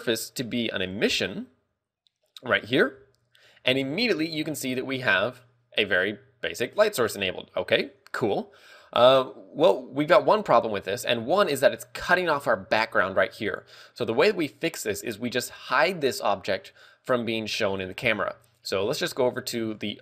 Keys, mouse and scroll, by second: 9.2 scroll up 1.